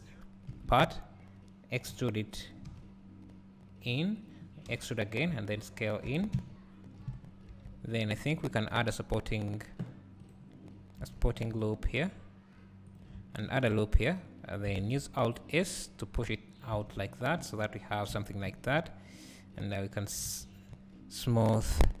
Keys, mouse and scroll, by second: 0.5 KP_3, 1.9 e, 4.3 click, 4.8 e, 5.0 right click, 5.4 s, 6.4 `, 7.2 scroll up 1, 7.6 Tab, 8.5 ctrl+r, 8.8 click, 11.2 ctrl+r, 11.2-13.4 right drag, 13.4 ctrl+r, 14.0 right click, 14.9 alt+s, 16.6 click, 16.8 Tab, 17.1 scroll down 1, 17.4 `, 18.2 alt+a, 18.6 `, 20.8-22.0 right drag.